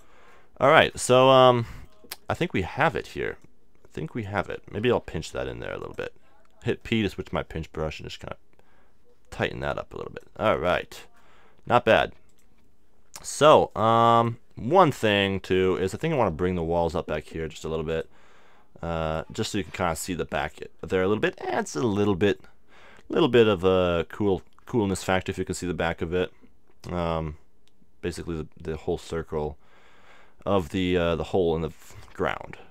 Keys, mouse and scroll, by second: 1.3-3.4 middle drag, 3.4-5.5 drag, 5.0 p, 5.5 f, 5.9-7.7 drag, 8.0-9.7 drag, 10.3 middle click, 10.5-12.3 middle drag, 12.3-15.5 drag, 15.0 middle click, 17.9-19.8 drag.